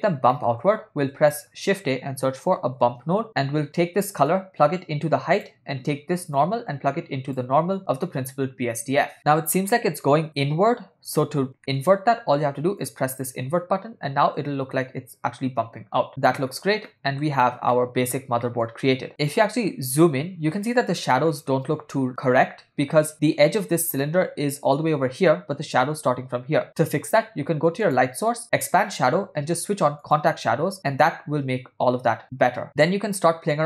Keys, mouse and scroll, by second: 0.3 middle click, 0.9 shift+a, 4.3-5.5 drag, 6.4-8.1 drag, 11.6 ctrl+middle click, 13.0 click, 16.1 ctrl+middle click, 16.9-17.3 shift+middle drag, 17.8 ctrl+middle click, 18.6 middle click, 19.1 ctrl+middle click, 27.8 click, 28.8 click, 30.2 click.